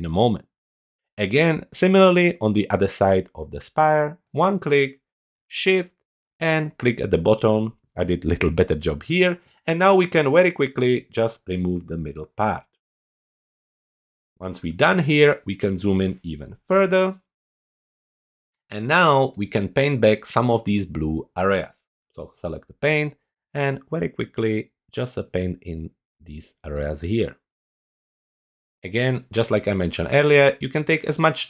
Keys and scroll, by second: 16.7 super+=, 19.2 space, 29.3 space.